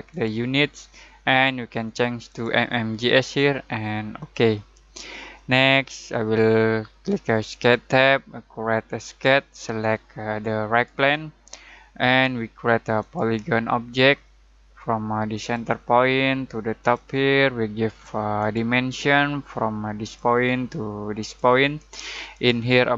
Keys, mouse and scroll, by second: 7.5 click, 10.7 click, 15.4 click, 20.1 click, 22.4 click.